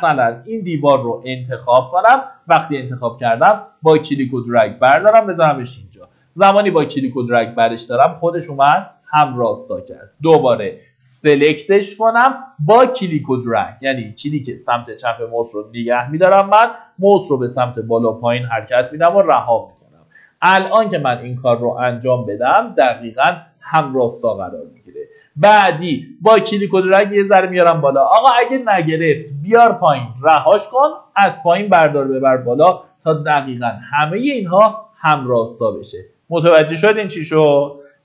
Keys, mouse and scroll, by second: 0.5-1.6 middle drag, 2.9-5.6 drag, 5.6 Escape, 8.7-9.2 scroll down 1, 9.2 middle click, 9.7-10.5 scroll up 1, 10.5-22.7 drag, 23.9-24.5 scroll down 1, 24.5 middle click, 25.0 scroll up 1, 25.9-36.7 drag, 37.3-37.6 scroll down 1, 37.6 middle click.